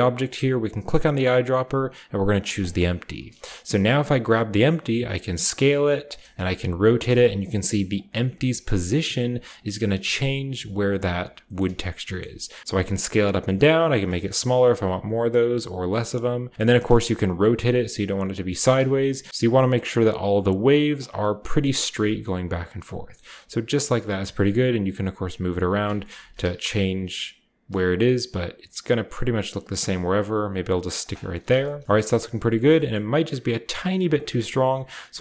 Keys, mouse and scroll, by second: 0.6 click, 2.5 click, 3.5 middle click, 4.8 s, 6.0 click, 6.3 r, 6.9 click, 7.2-9.0 scroll up 1, 7.4-8.3 typing, 7.9 click, 9.4 click, 9.7 typing, 10.8 click, 11.4-12.6 shift+middle drag, 11.6-12.6 shift+scroll up 1, 12.1-12.5 shift+drag, 12.5 typing, 13.8-18.4 drag, 15.1 typing, 15.3-16.5 scroll down 1, 16.5-18.2 scroll up 1, 16.6 r, 16.8-18.4 middle drag, 18.4-19.3 right drag, 18.8 KP_2, 20.8-22.6 drag, 21.1-22.2 middle drag, 21.9-23.0 scroll down 1, 23.0 scroll up 1, 23.2-25.4 middle drag, 23.3 g, 23.8-25.4 drag, 23.8-25.4 scroll up 1, 24.2 g, 25.6-28.5 middle drag, 25.8-28.5 scroll up 1, 26.0 g, 26.3 z, 30.9-32.2 drag, 31.1-31.8 scroll down 1, 31.4 a, 31.8-33.7 shift+scroll up 2, 32.2 shift+right drag, 33.7-35.2 shift+scroll down 2.